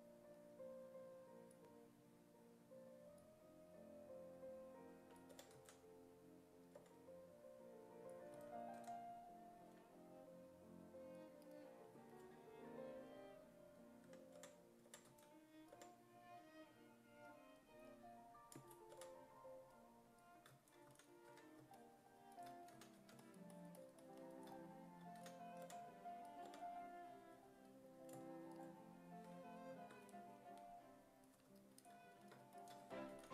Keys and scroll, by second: 5.1-6.8 typing, 8.4 s, 8.8 w, 9.7 e, 14.1 w, 14.4 5, 15.1 s, 15.8 5, 19.0 5, 20.9 s, 21.3 1, 22.5-23.5 typing, 25.2 s, 25.7 5, 26.5 4, 32.6-33.3 typing.